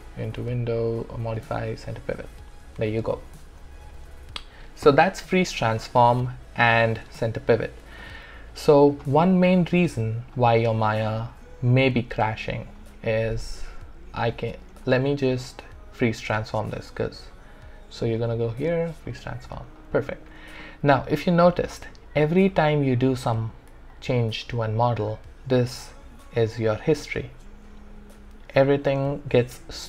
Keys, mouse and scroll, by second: 0.4 click, 5.1 click, 5.2-7.0 alt+drag, 8.0-9.3 alt+drag, 9.3 w, 18.0 click, 23.7 click, 23.9-27.2 alt+drag, 26.9 typing.